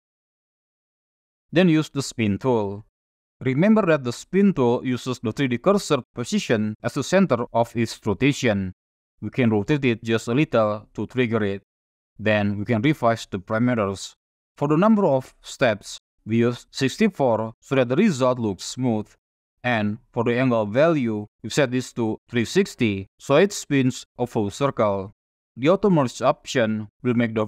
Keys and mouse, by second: 0.7 middle click, 2.9 click, 10.0 click, 14.5-16.6 drag, 20.1-22.2 drag, 22.6 click.